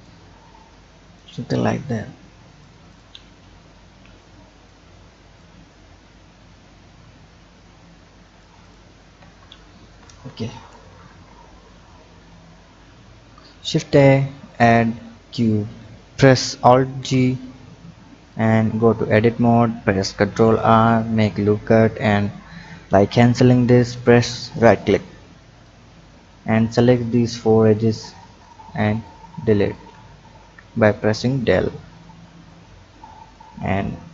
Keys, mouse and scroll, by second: 3.8 b, 5.3-8.4 drag, 8.6 click, 9.2 Tab, 10.1 click, 11.6-13.2 scroll up 1, 13.2 shift+a, 15.5 click, 16.8 alt+g, 17.4-18.3 scroll up 4, 18.3 click, 19.0 Tab, 20.0 ctrl+r, 25.6 click, 27.7 click, 28.4 shift+click, 29.0 shift+click, 29.6 shift+click, 30.4 Delete, 32.5 click, 33.5 Tab.